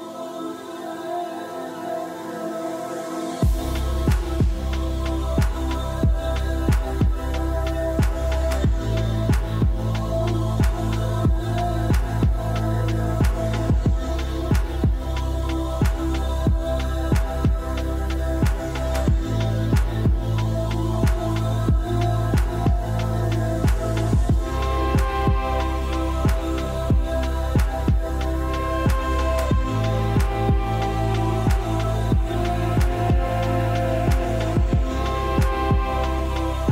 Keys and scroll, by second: 4.8 1, 19.5 ctrl+z, 24.5 1.